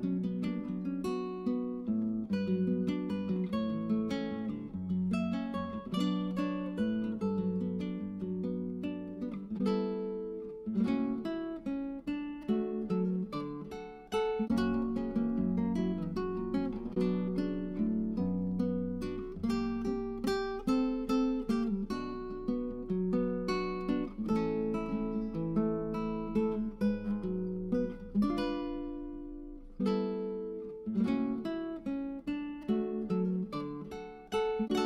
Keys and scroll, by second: 18.7 Escape.